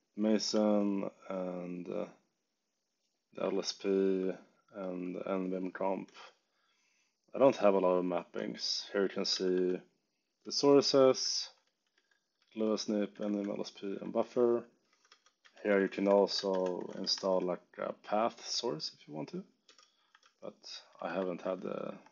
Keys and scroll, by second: 0.4 ↺, 3.6 ctrl+d, 6.0 ctrl+d, 8.6-17.6 typing, 19.3-22.1 typing.